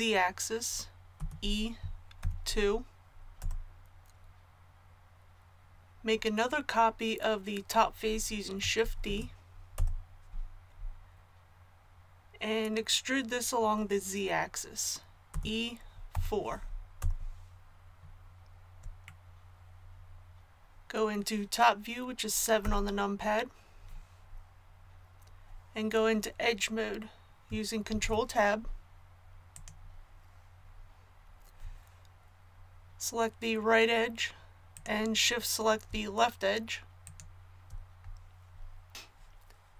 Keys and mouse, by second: 1.1 e, 9.0 shift+d, 15.3 e, 22.6 KP_7, 27.9 ctrl+Tab.